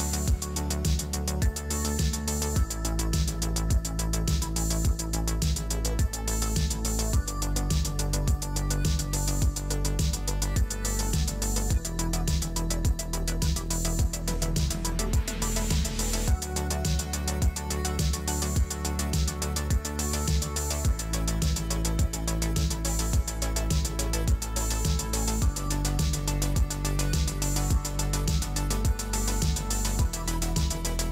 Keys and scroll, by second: 7.9 space, 21.5 space, 23.9 space.